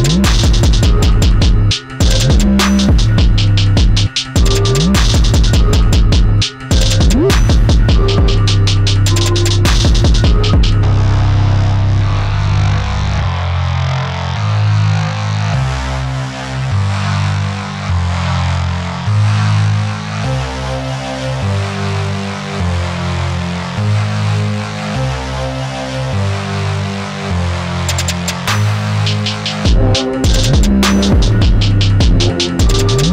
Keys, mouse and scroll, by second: 1.0-2.7 drag, 3.0-4.7 middle drag, 4.7 click, 5.2 e, 7.1-8.3 drag, 8.5-9.7 middle drag, 9.7 click, 10.5-12.1 middle drag, 12.1 e, 15.9-17.2 drag, 17.2-19.0 middle drag, 19.0 e, 23.8-26.0 middle drag, 26.0 s, 29.3 click, 30.8-32.2 drag, 32.5-33.1 middle drag.